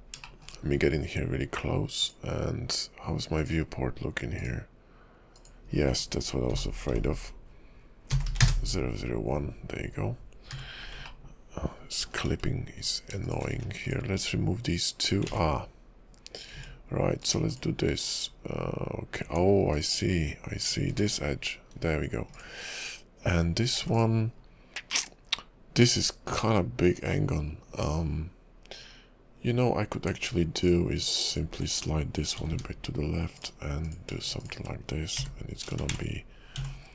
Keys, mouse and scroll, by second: 0.2 shift+middle click, 0.6 scroll up 1, 1.0 scroll down 3, 2.0 click, 3.3 click, 4.3 click, 5.3 click, 10.5 n, 11.1 ctrl+middle click, 12.8 click, 13.2 shift+click, 13.5 x, 15.4 ctrl+z, 17.2 Tab, 17.2 click, 17.5 shift+click, 18.2 scroll up 1, 19.2 Tab, 19.2-19.7 scroll up 1, 19.7 click, 20.6 click, 20.9 x, 21.7 scroll down 2, 22.3 click, 23.4-23.7 scroll down 2, 23.8 x, 24.4-25.4 scroll down 1, 25.4-26.0 scroll down 1, 26.1-26.4 scroll down 3, 27.0 scroll up 2, 27.7-29.1 scroll down 4, 29.5 Tab, 30.6 click, 31.3 ctrl+click, 32.3 g, 33.8 click, 34.4 shift+click, 35.3 h, 36.0 ctrl+z, 36.7 j.